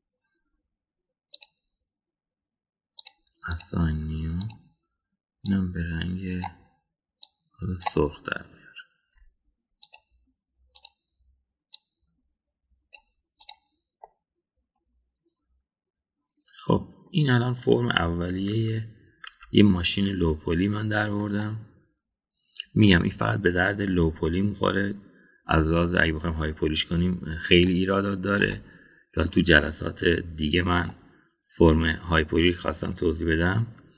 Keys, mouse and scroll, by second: 0.4 ctrl+l, 2.5 click, 4.0 click, 4.5 click, 5.4 drag, 10.8 click, 11.7 click, 14.4 click, 15.0-18.0 middle drag, 19.5 Tab, 20.3 Tab, 22.4-23.9 middle drag, 28.6 middle click, 31.9 middle click.